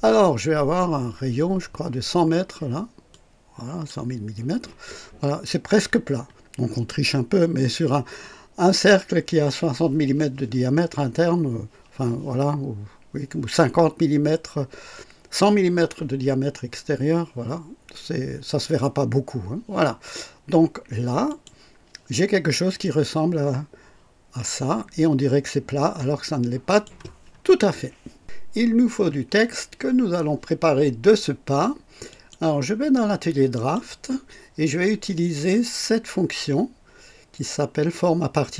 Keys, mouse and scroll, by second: 3.1-4.0 drag, 5.4 scroll up 2, 6.3-6.6 scroll down 2, 21.3 click, 22.8-27.0 drag, 32.0 click, 33.5 click.